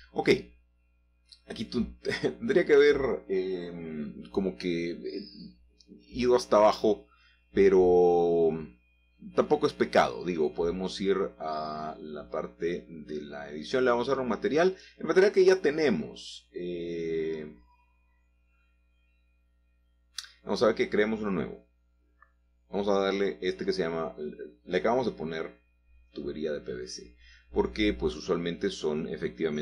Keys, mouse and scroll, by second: 0.0 click, 0.6 Tab, 1.4 Tab, 1.7 scroll down 2, 2.6-3.6 shift+middle drag, 4.6 shift+click, 5.2-5.8 shift+scroll down 1, 6.5 click, 7.1 shift+click, 8.8 click, 10.2 click, 14.1 click, 14.7 click, 17.5 click, 19.2 shift+p, 19.4 shift+v, 19.7 shift+c, 19.9 shift+space, 21.0-21.6 typing, 21.7 Return, 24.9-25.4 scroll down 5, 26.8 click, 27.6-28.2 scroll down 6.